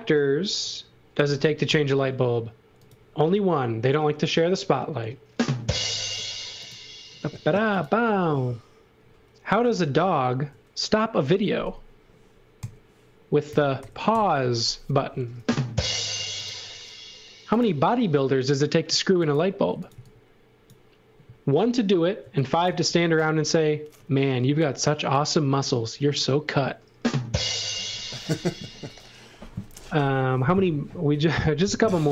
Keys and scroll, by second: 1.6 a, 10.0 1, 10.3 0, 11.4 Escape, 12.6 a, 13.4 1, 13.8 0, 14.1 Return, 19.4-20.4 typing, 22.2 x, 22.6 v, 24.5 shift+1, 26.0 l.